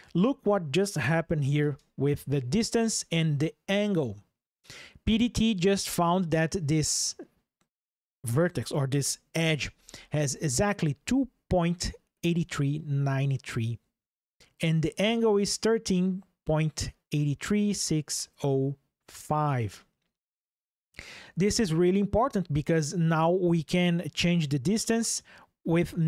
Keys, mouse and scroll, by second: 0.1 ctrl+shift+2, 1.4 ctrl+shift+\.